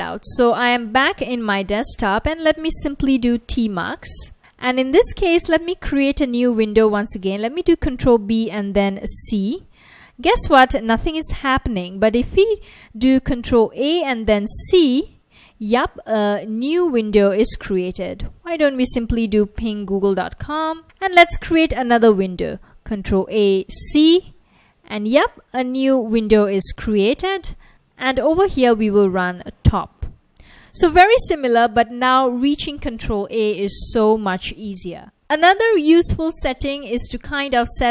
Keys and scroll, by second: 0.7-1.1 typing, 2.2-4.3 typing, 8.0 ctrl+b, 9.2 c, 10.9 BackSpace, 13.8 ctrl+a, 14.6 c, 17.0 F1, 18.5-21.1 typing, 23.3 ctrl+a, 23.9 c, 25.4 F1, 28.5-29.6 typing, 29.9 Return, 35.3 Return.